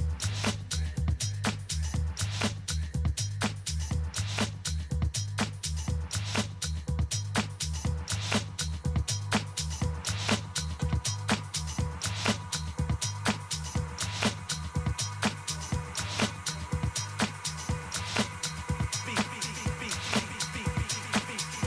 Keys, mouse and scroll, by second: 7.3-11.7 drag, 11.4 a, 11.7-16.1 middle drag, 11.8 a, 13.1 a, 13.5 a, 16.5-18.5 middle drag, 18.5-20.4 drag, 19.5-21.6 middle drag.